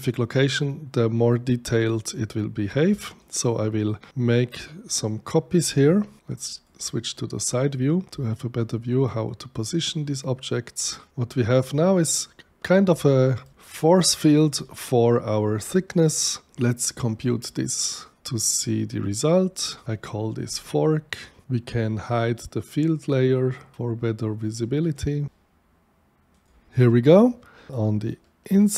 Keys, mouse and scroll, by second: 3.2 alt+click, 4.5-5.5 drag, 6.5 click, 8.6-10.8 alt+drag, 11.4 click, 12.1 right click, 13.0 shift+right click, 14.0 shift+click, 14.6-16.5 shift+right drag, 17.2 shift+click, 19.7 click, 19.8 k, 21.2 click, 23.2 click, 24.9 click, 26.3 click, 28.0 shift+right click.